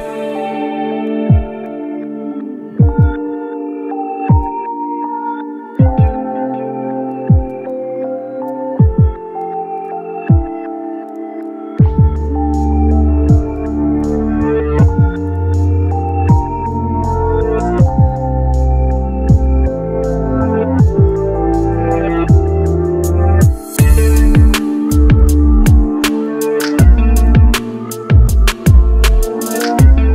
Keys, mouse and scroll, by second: 0.3-0.6 scroll up 1, 18.3-18.7 scroll down 1, 21.7 scroll up 1, 22.9 scroll down 1, 27.5 typing, 29.3 typing.